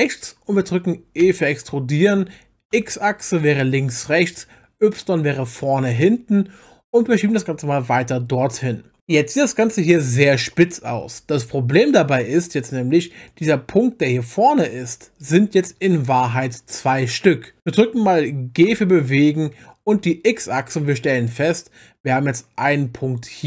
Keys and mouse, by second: 1.2 e, 2.7 x, 4.9 y, 14.0 click, 15.2 click, 18.7 g, 19.9 x.